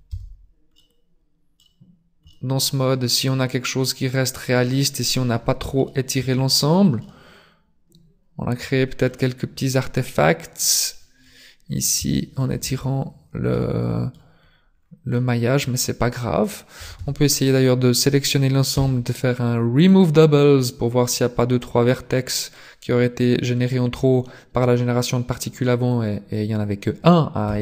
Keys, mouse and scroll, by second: 0.1 Tab, 0.7 middle click, 2.3 middle click, 5.9 shift+middle click, 6.3-6.7 scroll up 9, 7.0 middle click, 9.7 scroll down 4, 10.9 scroll down 1, 11.0-11.3 scroll up 7, 12.1 shift+middle click, 12.7 Tab, 13.5 middle click, 14.8 scroll down 2, 15.1 middle click, 15.9 scroll down 2, 16.9 a, 17.0 a, 18.8 w, 27.5 Tab.